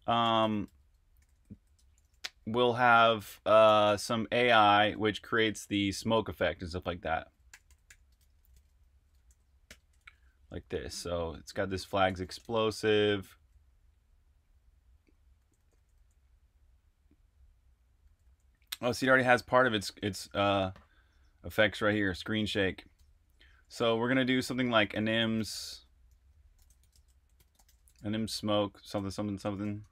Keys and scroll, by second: 0.0-5.5 typing, 7.2-10.7 typing, 12.4-13.1 typing, 15.3-15.9 typing, 18.0-20.1 typing, 22.9 Escape, 23.1-27.8 typing, 29.1-29.9 typing.